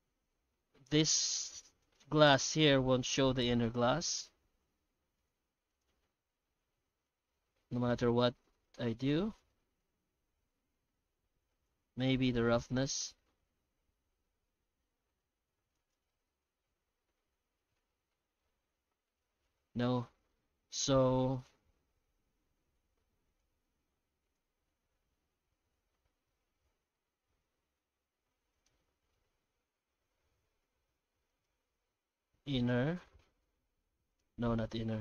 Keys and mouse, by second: 1.9 right click, 2.4 g, 5.2 click, 5.7 click, 9.0 click, 10.8 click, 12.8-15.9 drag, 21.4 click, 23.4 click, 28.6 right click, 30.0 g, 32.6 click, 33.3 g.